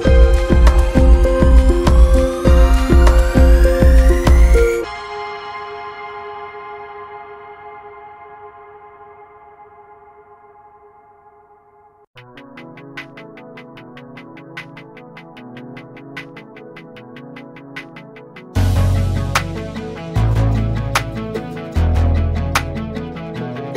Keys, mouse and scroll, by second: 0.1 Tab, 1.7-3.0 drag, 3.0-3.8 scroll up 6, 3.8 alt+z, 4.1-5.1 middle drag, 5.1 s, 6.8 click, 7.3-9.6 middle drag, 9.6-10.1 scroll down 4, 10.1-10.8 middle drag, 10.8 scroll up 5, 11.4 click, 11.8-12.2 scroll down 1, 13.0-16.8 drag, 16.8 /, 17.5-19.1 right drag, 19.1-20.5 middle drag, 20.5 Tab, 21.7 alt+click, 22.5 alt+click, 23.5 f.